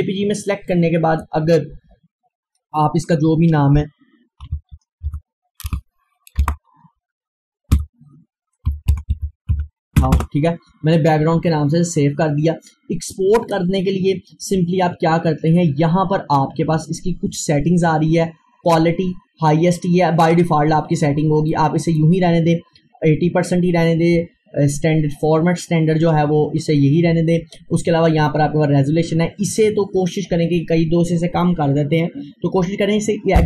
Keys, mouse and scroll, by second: 4.4 click, 4.5-6.4 typing, 7.8-10.5 typing, 13.1 Return, 21.5-24.5 drag, 27.1-29.3 drag, 29.3 scroll down 1.